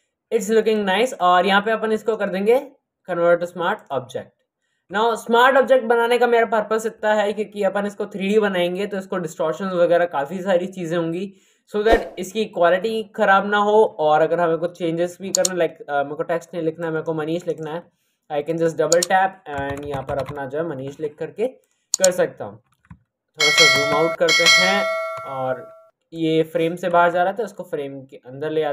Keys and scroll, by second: 19.6-20.2 typing, 23.6 ctrl+KP_0, 25.1 c.